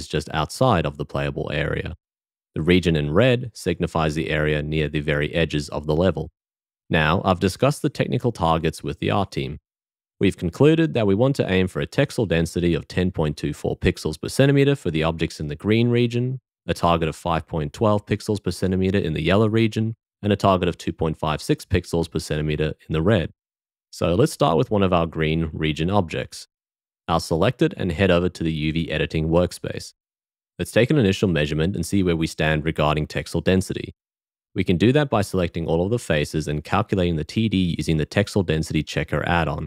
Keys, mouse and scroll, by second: 28.3 q.